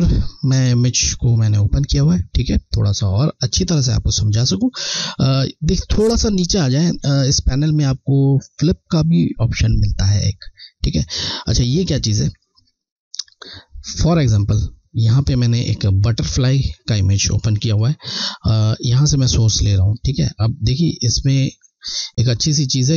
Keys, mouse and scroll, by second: 0.1 click, 2.1 scroll, 2.8 alt+scroll up 1, 12.7 alt+scroll up 1, 12.8 scroll, 14.1 click, 14.1 click, 18.2 click.